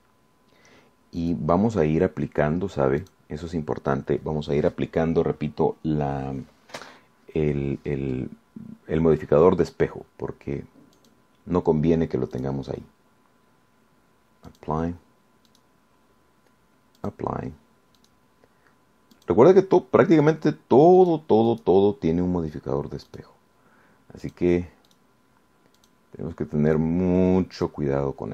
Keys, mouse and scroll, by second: 0.3-1.4 drag, 1.5-2.0 scroll up 1, 2.4 click, 4.3 click, 12.2 click, 13.6 click, 15.7 click, 16.7 click, 18.2 click, 19.2 click, 20.4 click, 21.5 click, 22.2 click, 22.7 click, 24.3 click, 25.5 click, 26.1 click, 27.0 click, 27.9 click.